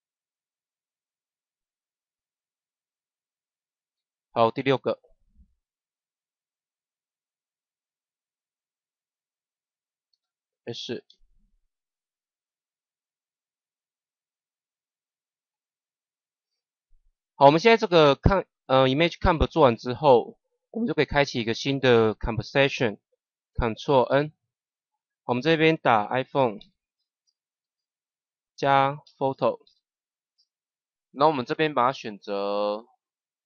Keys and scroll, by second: 2.5 Delete, 10.0 Delete, 11.0 s, 24.0 ctrl+n, 26.2 i, 26.5 p, 27.1 o, 27.4 n, 28.9 shift+=, 29.6 p, 30.2 o, 30.7 t.